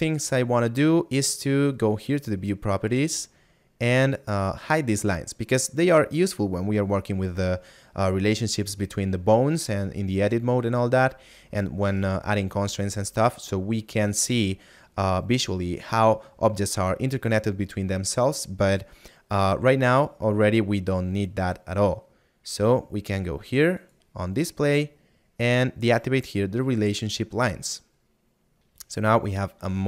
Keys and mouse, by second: 2.4 middle click, 22.5 middle click, 24.7 middle click, 28.8 right click.